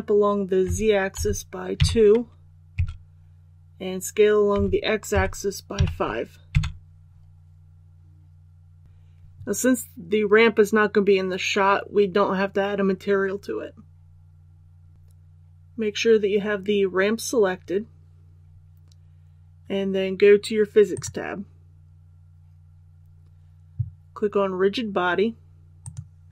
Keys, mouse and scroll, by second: 0.6-1.7 typing, 4.5-5.7 typing, 14.9 click.